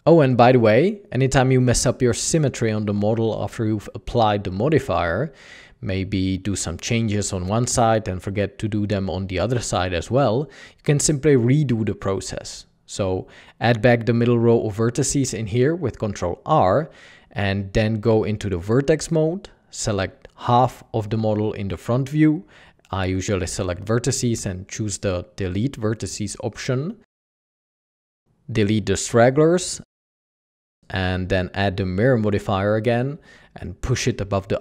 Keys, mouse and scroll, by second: 0.0 typing, 1.7 typing, 11.8 typing, 11.9 alt+a, 14.5 ctrl+r, 15.2 Escape, 21.2 alt+a, 21.6 b, 31.2 Tab, 32.1 b.